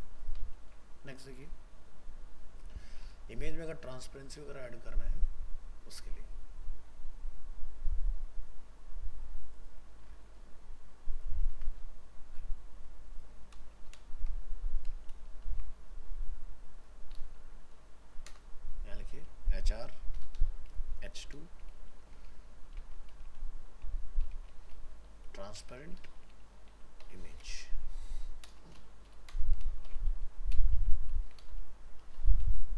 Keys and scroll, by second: 0.6 ctrl+w, 11.5 ctrl+c, 15.1 ctrl+v.